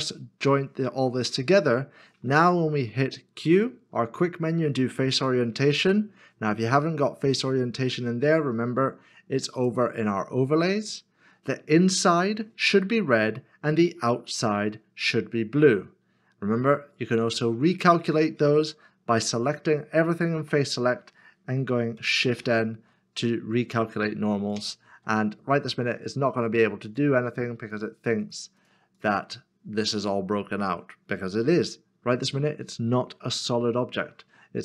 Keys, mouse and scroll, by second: 1.8 middle click, 3.4 q, 20.4 q, 22.4 shift+n.